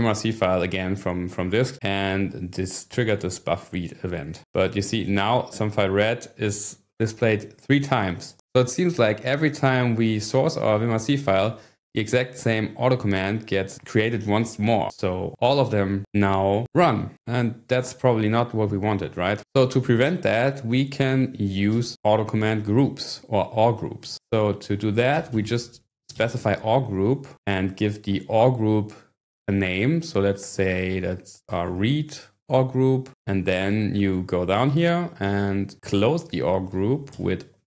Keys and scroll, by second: 19.5-20.4 typing, 21.7 Up, 24.2-27.4 typing, 31.1-32.1 typing, 33.1 Escape, 34.5 Page_Down, 34.6 Page_Down, 35.1-37.6 typing.